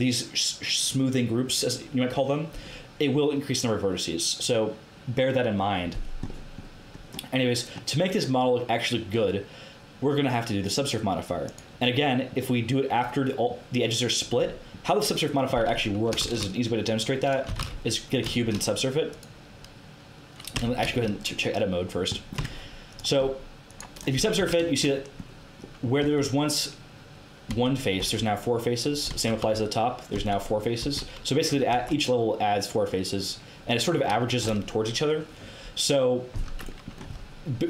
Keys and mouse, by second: 6.2-10.3 middle drag, 10.3-12.0 drag, 12.2-13.4 middle drag, 16.1 shift+a, 17.4 g, 19.0 click, 19.7 click, 20.5 Tab, 22.3 Tab, 24.0 middle click, 24.3 Tab, 26.0 Tab, 27.4 Tab, 28.0 Tab, 29.0 Tab, 29.3 KP_7, 30.1 Tab, 30.8 Tab, 31.7 Tab, 33.1-35.1 drag, 36.8-37.6 middle drag.